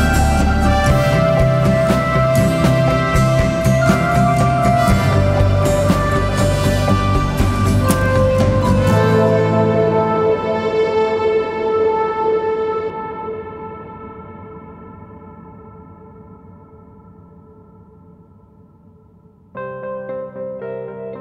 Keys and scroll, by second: 2.3 1, 2.4 F1, 2.5 F2, 13.0 Delete, 15.5 Delete, 19.1 ctrl+z.